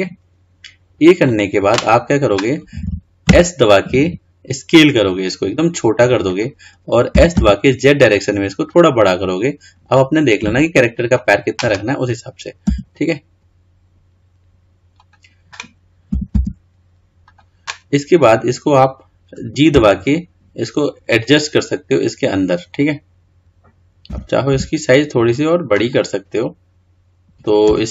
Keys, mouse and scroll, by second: 23.9-24.3 scroll up 5, 24.3 s.